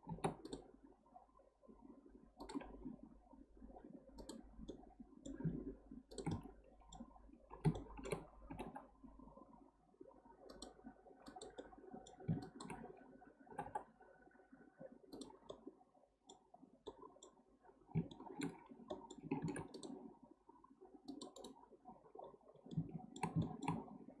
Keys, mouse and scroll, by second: 0.1 ctrl+r, 4.2 click, 4.7-6.1 middle drag, 6.1 shift+click, 6.3-8.5 middle drag, 8.5 g, 11.3 click, 11.6 middle click, 12.4 shift+click, 13.5 g, 15.5-16.5 middle drag, 16.5-16.9 scroll down 1, 16.9-18.6 middle drag, 18.6-18.9 scroll up 1, 18.9-19.4 middle drag, 19.4 ctrl+r, 21.4-22.1 right drag, 22.1-22.7 scroll down 7, 22.7-23.8 middle drag, 23.8-24.2 scroll up 4.